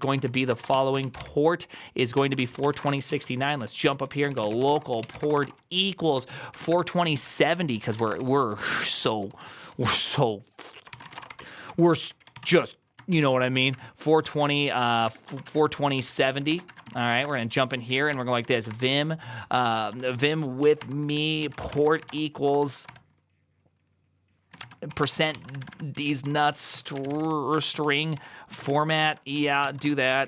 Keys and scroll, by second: 0.0-23.1 typing, 2.0 Tab, 24.4-30.2 typing.